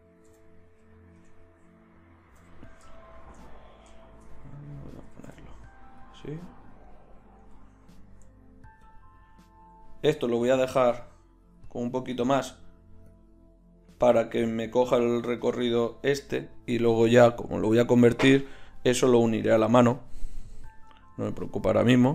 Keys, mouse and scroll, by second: 2.4 KP_1, 5.0 g, 7.5 KP_1.